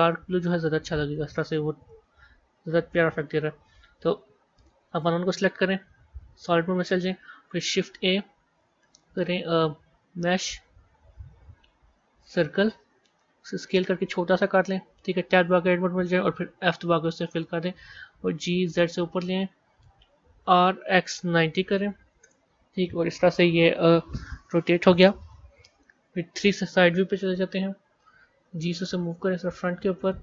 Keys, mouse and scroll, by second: 1.4-2.1 middle drag, 2.1-2.7 scroll down 4, 3.2-3.9 scroll up 6, 4.4 click, 5.7 z, 6.5 scroll down 1, 7.6 shift+a, 13.3 s, 15.4 b, 17.5 Tab, 18.1 g, 20.4 r, 27.0 KP_3, 28.3 g.